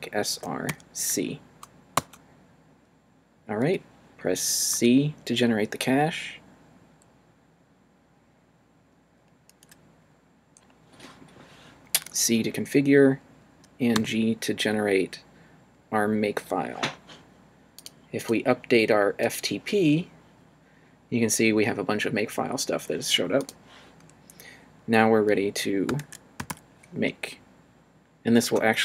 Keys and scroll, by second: 0.3 r, 0.7 c, 1.9 Return, 4.7 c, 11.9 c, 13.9 g, 25.7-27.0 typing, 28.4 Return.